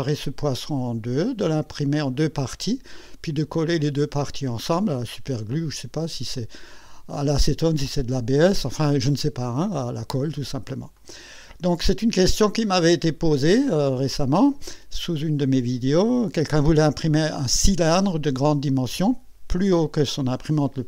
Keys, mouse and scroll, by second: 8.4-9.5 drag, 10.0 right click, 11.0-12.4 drag, 12.5 right click.